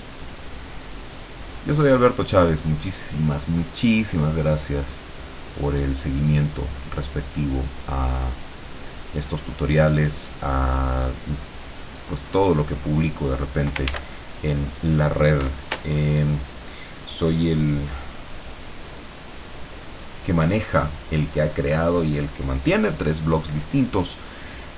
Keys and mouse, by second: 2.2 click, 2.8-5.4 drag, 6.4-9.0 drag, 9.8-12.8 drag, 14.0 ctrl+s.